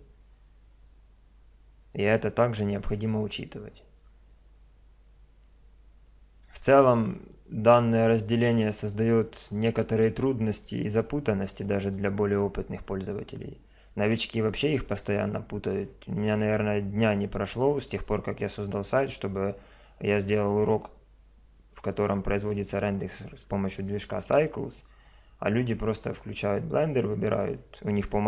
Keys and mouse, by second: 7.2 click, 26.3-27.9 right drag, 27.9 click, 28.0 middle click.